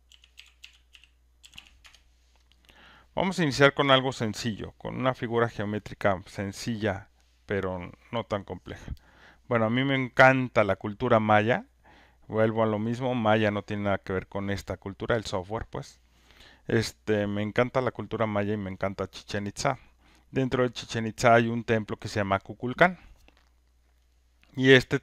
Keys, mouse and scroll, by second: 0.0-2.0 typing, 3.9 click, 6.8 click, 15.2-20.3 drag.